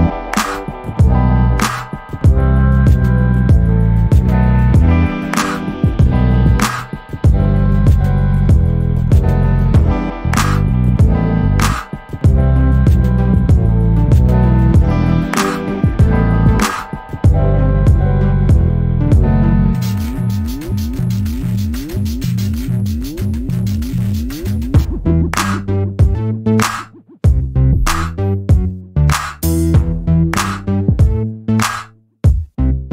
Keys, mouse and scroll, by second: 0.3 ctrl+d, 0.5-3.2 ctrl+drag, 3.3-4.5 ctrl+drag, 5.3 ctrl+d, 5.6-9.2 ctrl+drag, 9.9 shift+click, 10.4 shift+click, 10.9 shift+click, 12.1 shift+click, 12.7 shift+click, 13.8 ctrl+KP_Add, 15.1 click, 16.4 ctrl+d, 17.4 shift+click, 23.4 click, 24.5-26.4 drag, 27.2 ctrl+shift+click, 28.9 click, 29.8 click, 31.1-32.9 ctrl+drag.